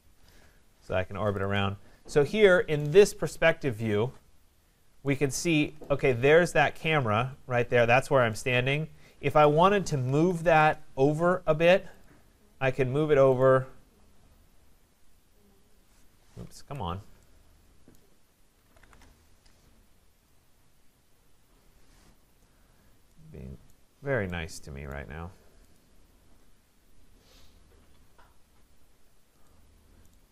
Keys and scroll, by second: 3.4 Escape, 10.6 Return, 16.5 Escape, 18.9 Return.